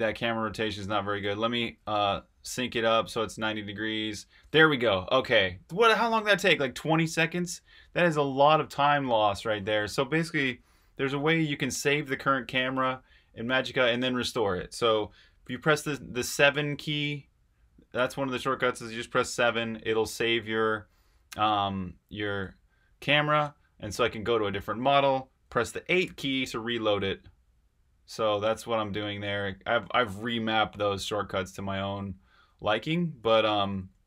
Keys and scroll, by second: 0.6-2.0 typing, 19.3 7, 22.4-22.8 space, 23.0 space, 23.2 space, 23.4 space, 26.0 8.